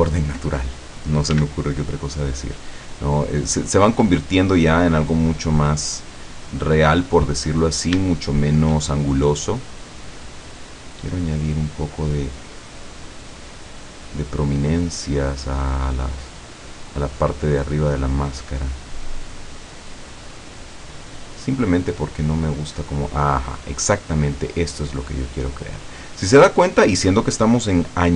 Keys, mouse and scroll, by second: 0.7 scroll down 2, 1.3 f, 2.6 click, 3.0 middle click, 3.8-5.0 drag, 5.9 click, 7.0 click, 7.6 middle click, 8.0 scroll up 1, 8.2 shift+middle click, 9.2-13.5 shift+drag, 14.5 click, 15.4 click, 16.0 click, 18.2 click, 19.1 click, 19.8 click, 21.8 middle click, 23.2-26.6 drag.